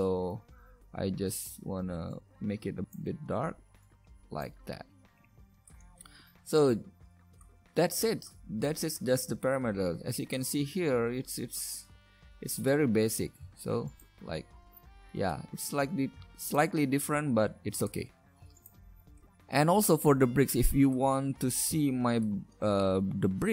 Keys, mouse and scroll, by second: 13.9-19.4 drag, 19.4-19.9 right drag.